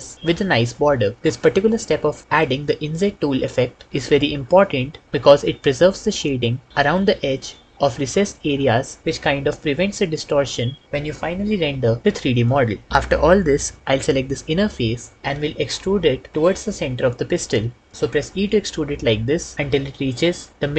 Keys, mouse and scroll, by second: 18.1 e.